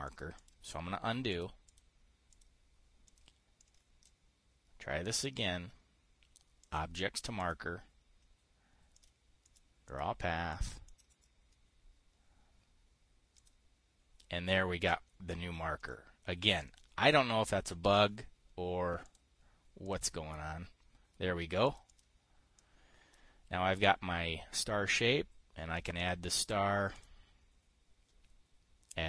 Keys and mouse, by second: 0.6 click, 0.9 click, 1.8 click, 2.2 click, 2.8 click, 3.6 click, 4.1-4.7 drag, 5.8 click, 7.1 click, 7.9 click, 9.4 click, 10.0 click, 10.4 click, 11.0 click, 11.4-14.0 drag, 16.4-19.4 drag, 19.6 click, 20.4-22.4 drag, 22.5-24.5 drag, 26.5 click.